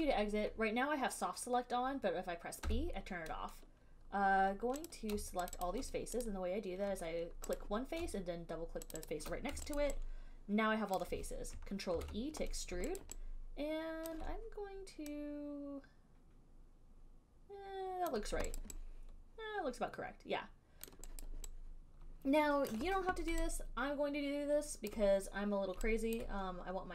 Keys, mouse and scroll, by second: 2.9 b, 5.1 click, 5.7 shift+click, 5.8 shift+click, 6.4 click, 7.8 click, 9.2 shift+click, 9.3 shift+click, 10.0 alt+right click, 11.2 alt+right click, 12.2 ctrl+e, 13.2 alt+click, 14.3 alt+click, 18.3 click, 18.8 alt+click, 21.1 alt+click, 21.5 alt+click, 22.9 alt+click, 25.1 alt+click, 26.4 alt+click.